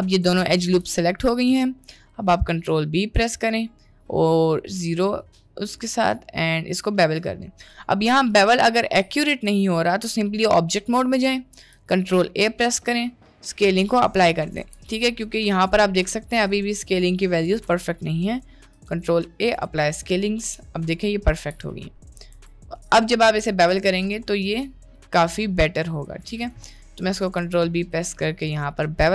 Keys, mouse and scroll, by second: 0.9 g, 1.7 middle click, 2.5 ctrl+b, 8.6 middle click, 9.2 Tab, 9.6 middle click, 11.7 ctrl+a, 14.6 n, 17.4 n, 18.3-18.8 right drag, 18.9 ctrl+a, 20.4 n, 21.4 n, 21.7 middle click, 22.4 Tab, 22.9 middle click, 23.3 ctrl+b, 26.8 middle click, 27.4 ctrl+b.